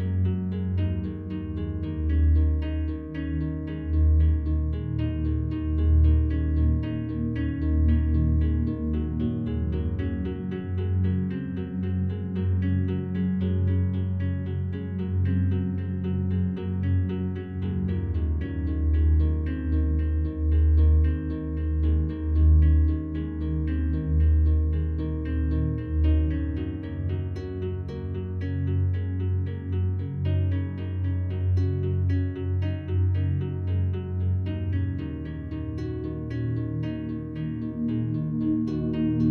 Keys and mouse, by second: 0.2 ctrl+alt+drag, 0.6 ctrl+alt+drag, 1.5 alt+click, 2.3 typing, 2.9 ctrl+alt+click, 3.8 click, 4.5 click, 5.1 click, 6.0 click, 6.1 z, 6.5 click, 7.5 g, 7.7 y, 8.6 click, 9.1 click, 9.9 g, 10.1 y, 10.8 click, 12.6 Tab, 13.1-14.3 alt+drag, 14.9 alt+click, 16.0 click, 16.9 ctrl+alt+drag, 17.4-18.2 alt+drag, 18.7 click, 18.9 Tab, 21.0 Tab, 21.0 z, 21.0 3, 21.0 g, 21.0 y, 21.1 click, 22.6 click, 22.8 click, 23.8 click, 27.6 click, 28.5 click, 28.8 click, 30.3 click, 31.5-31.9 alt+drag, 33.3 click, 34.2 alt+click, 34.7 ctrl+alt+click, 35.6 f, 36.1 click, 36.4 alt+shift+click, 37.6 F3, 38.2-39.3 ctrl+alt+drag.